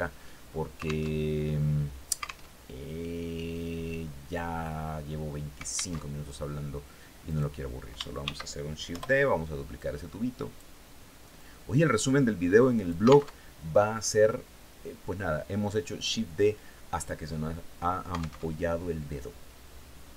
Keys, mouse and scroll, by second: 0.6 alt+Tab, 1.9 alt+Tab, 5.4 alt+Tab, 6.7 right click, 7.7 shift+d, 8.3 Return, 9.2 click, 10.8-12.7 drag, 12.7 alt+Tab, 17.9 alt+Tab.